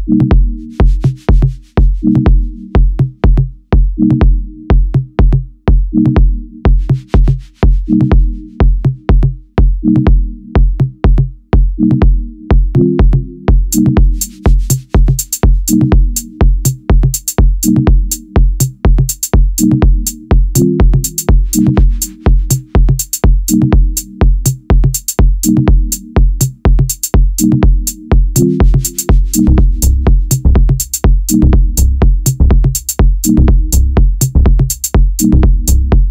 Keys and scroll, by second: 0.0 shift+a, 0.8 shift+c, 1.0 KP_7, 1.2 Tab, 1.8 2, 4.2 s, 7.2 ctrl+r, 9.5 ctrl+r, 11.3 3, 12.7 i, 16.8 1, 17.3 a, 20.0 s, 21.8 a, 25.6 a, 26.7 e, 28.3 a, 28.9 3, 32.0 i.